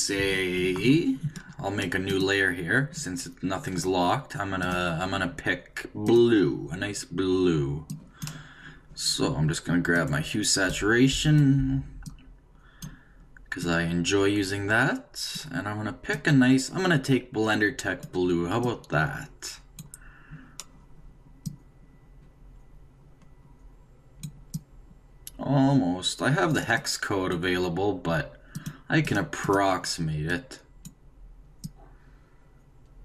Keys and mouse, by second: 2.1-3.7 drag, 4.6-7.7 drag.